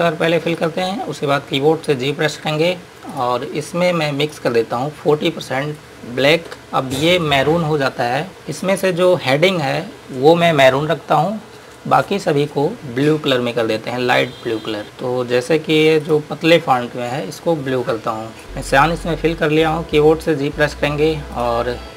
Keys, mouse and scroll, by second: 0.9 click, 2.6 g, 3.4 click, 6.6 KP_Enter, 8.8 click, 10.4 scroll up 1, 13.1 scroll down 1, 14.0 scroll up 1, 14.8 click, 15.3 scroll up 1, 16.2 click, 20.9 g, 21.6 click.